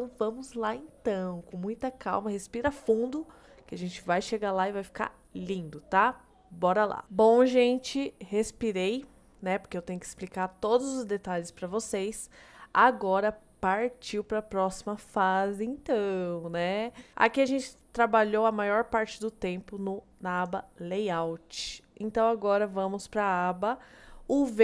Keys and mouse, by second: 20.4 click.